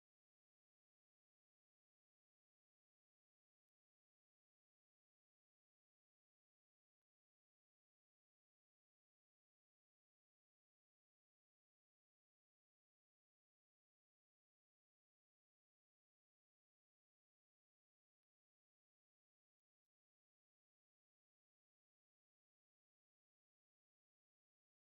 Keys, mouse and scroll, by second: 1.4 Tab, 4.2 x, 11.6 Tab, 12.5 shift+a, 15.9 click, 17.3 click, 18.7-20.8 drag.